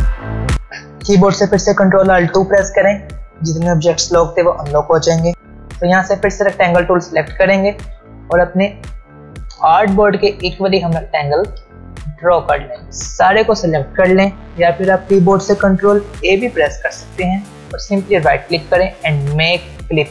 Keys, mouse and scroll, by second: 0.1 click, 0.4 shift+Up, 0.5-0.9 alt+scroll down 1, 0.9 click, 1.7 click, 5.3 click, 6.3 ctrl+alt+scroll up 1, 9.7 ctrl+alt+scroll down 1, 10.8 alt+scroll up 1, 12.1-12.5 alt+scroll down 1, 12.5 space, 12.9-14.6 drag, 16.2 ctrl+a, 18.0 right click.